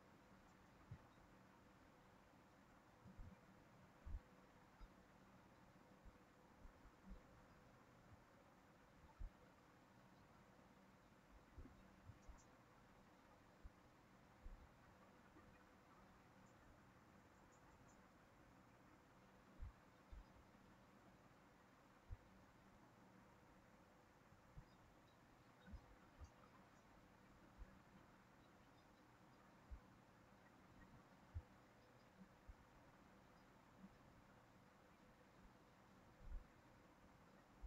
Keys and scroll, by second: 2.4 ctrl+c, 2.6 ctrl+v, 29.3 ctrl+c, 29.5 ctrl+v.